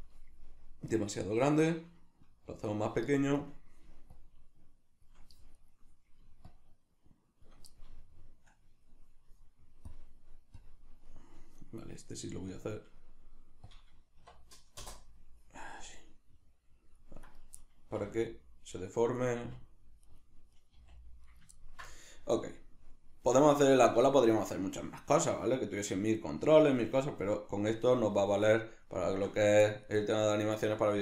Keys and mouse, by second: 3.4 right click, 4.1-5.6 shift+drag, 5.6 right click, 6.5-7.8 shift+drag, 7.8-9.9 middle drag, 9.9 click, 11.1-12.5 middle drag, 12.5 click, 13.6-15.5 drag, 14.8 Return, 15.5-17.2 middle drag, 17.2 right click, 17.6-18.8 middle drag, 18.0 r, 19.2 right click, 19.4 r, 20.5 right click, 20.7 r, 21.4 right click, 21.6-31.0 ctrl+middle drag.